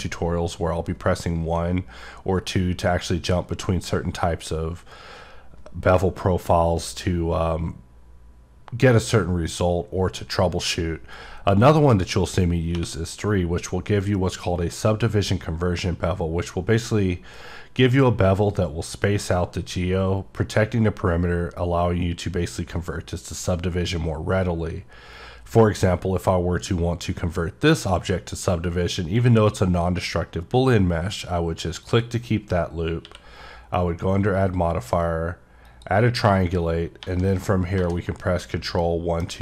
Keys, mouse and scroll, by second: 33.2 click, 35.7 click, 38.8 middle click.